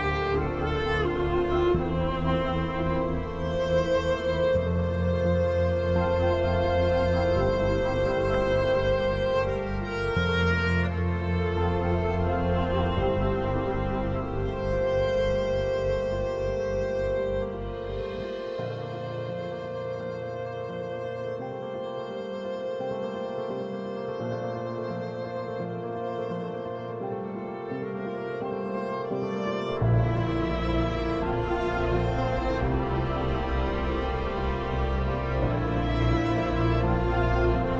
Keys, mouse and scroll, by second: 3.0 F3, 4.9-8.2 alt+drag, 8.2 Escape, 8.4-13.4 drag, 10.7 typing, 13.4 F2, 14.0-16.4 drag, 16.4 right click, 17.2 click, 18.0 End, 18.5 shift+Home, 18.8-20.3 typing, 21.5 click, 22.2-23.6 right drag, 23.6-30.5 shift+drag, 30.5 F3, 30.9 F4, 31.6 F2, 31.9 click, 33.0 Escape, 34.0 F2, 34.1-35.5 drag, 35.5 F4, 36.3 click, 37.5 F2, 37.6-37.7 drag.